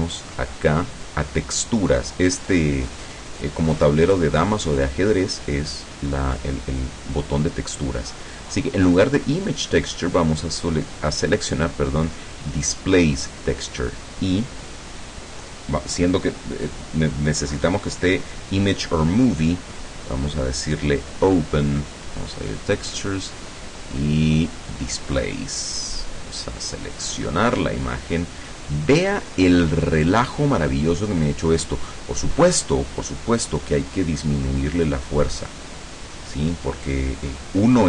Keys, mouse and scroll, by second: 0.9 click, 3.1 click, 9.9 click, 12.3 click, 21.1 click, 22.5 click, 25.1 click, 27.1 click, 29.7-30.3 scroll down 2, 30.5-30.9 scroll up 2, 33.3 click, 35.5 click.